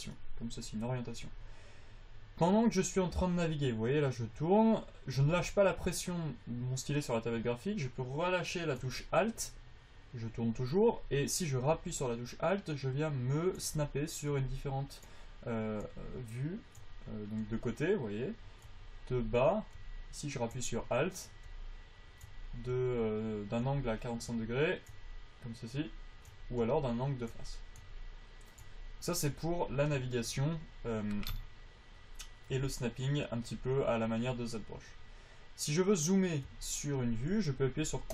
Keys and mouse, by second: 0.8-3.1 middle drag, 32.8 KP_5.